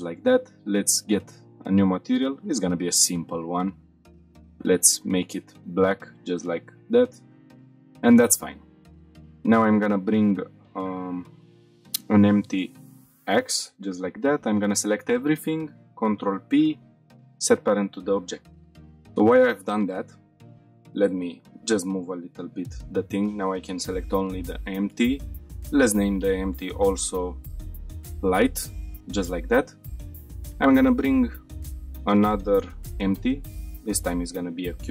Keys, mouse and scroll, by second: 0.7-1.3 drag, 1.9-2.6 drag, 3.5-4.2 scroll down 2, 4.2 click, 4.2 scroll down 1, 7.4 scroll down 1, 7.8 shift+middle drag, 8.2-8.8 scroll down 3, 8.9 shift+middle click, 9.7 shift+a, 13.3 middle click, 14.0-14.4 drag, 14.8-15.6 scroll up 1, 16.0 ctrl+p, 18.6 F5, 19.2-19.7 scroll up 1, 19.9-20.2 shift+middle drag, 20.4 scroll down 2, 21.3 click, 23.0 click, 23.9 g, 24.0 z, 24.5 click, 24.8 shift+middle drag, 25.8 click, 26.0-28.5 drag, 29.4-29.7 scroll down 2, 29.8 shift+middle click, 30.4 shift+a, 34.7 s.